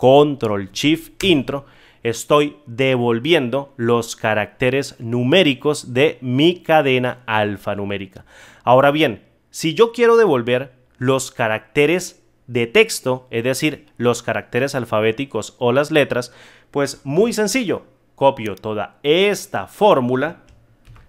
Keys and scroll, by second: 17.1 F2, 20.8 ctrl+c.